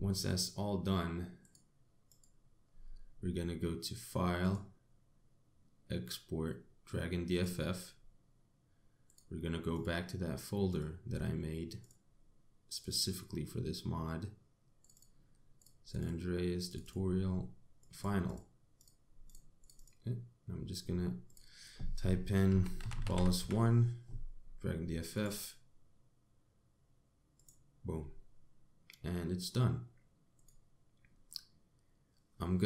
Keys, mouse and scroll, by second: 2.0 click, 2.7 click, 5.1 click.